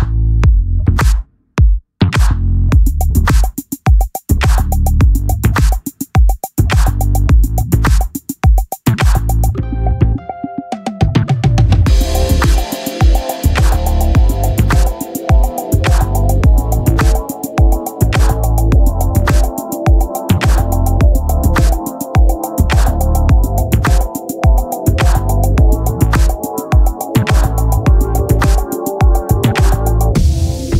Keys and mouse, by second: 1.1 click, 4.0 click, 7.3 click, 10.7 click, 15.3 ctrl+t, 17.5 click, 26.0 Return.